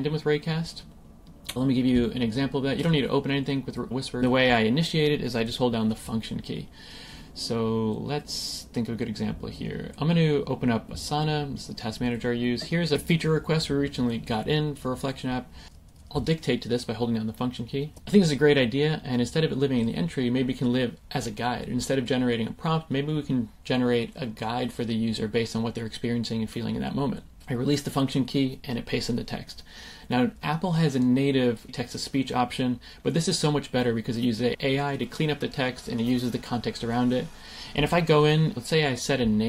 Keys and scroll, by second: 18.0 BackSpace, 27.8 super+v.